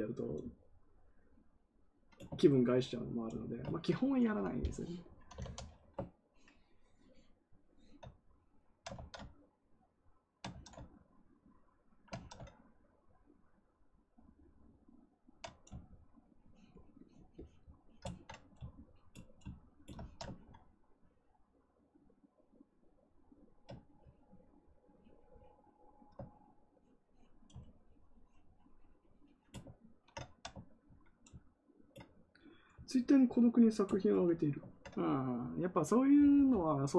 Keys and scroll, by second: 5.0-5.8 typing, 8.9 ctrl+z, 10.4 ctrl+z, 12.1 ctrl+z.